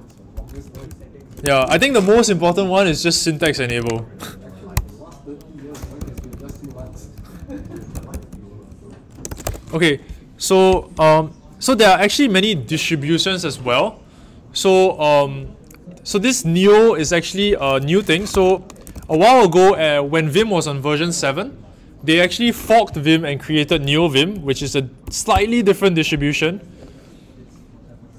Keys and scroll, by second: 0.5-2.0 typing, 3.1-4.3 typing, 4.7 Escape, 5.8-10.3 typing, 17.9-19.4 typing, 23.9 typing, 24.9 typing, 25.2 Return.